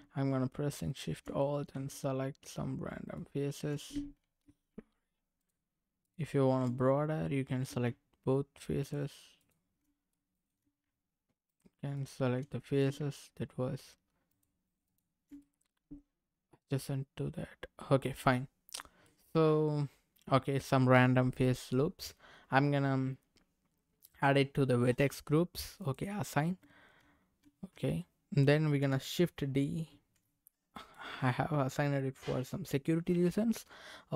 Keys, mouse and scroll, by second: 0.8 alt+shift+click, 1.4 middle click, 3.0 alt+shift+click, 4.2 ctrl+z, 5.3 alt+shift+click, 6.0 alt+shift+click, 6.8 middle click, 8.8 alt+shift+click, 9.3 alt+shift+click, 10.1 middle click, 11.5 alt+shift+click, 11.9 alt+shift+click, 12.5 middle click, 14.3 alt+shift+click, 14.8 alt+shift+click, 15.4-18.7 middle drag, 18.8 scroll down 1, 19.0-20.6 middle drag, 21.4 middle click, 24.2 click, 25.8 click, 26.6 Tab, 27.4 Tab, 29.8 shift+d, 30.7 right click.